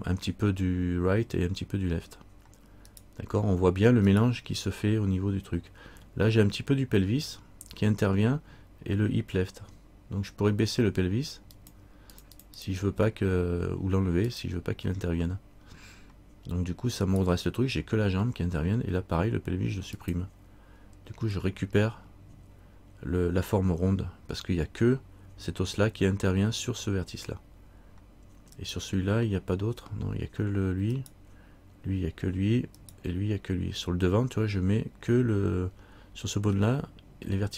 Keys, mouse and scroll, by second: 3.1 right click, 11.7 click, 17.2 right click, 20.2 click, 28.8 right click.